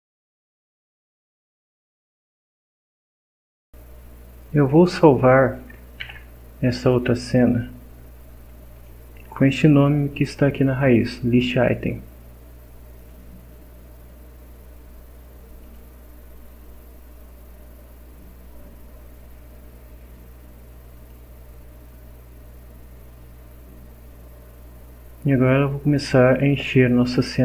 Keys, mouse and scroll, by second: 1.0 click, 1.6 click, 6.0 ctrl+s, 8.7 click, 13.0 click, 15.6 click, 17.0 scroll down 2, 17.7 scroll up 2, 20.9 click.